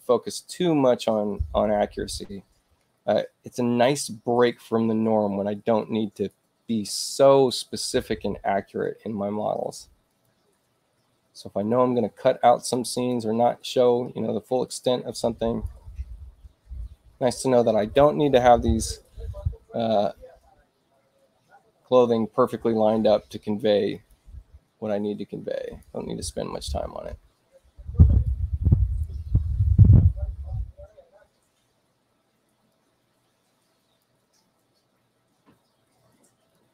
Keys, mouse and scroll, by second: 2.7 ctrl+alt+c, 4.3-6.2 drag, 10.0 ctrl+click, 11.6-13.0 drag, 14.6-15.6 ctrl+drag, 17.7 click, 23.8 click, 25.6 click, 27.0 ctrl+alt+c, 28.1 click, 32.6-33.9 drag, 36.2 ,, 36.4 click.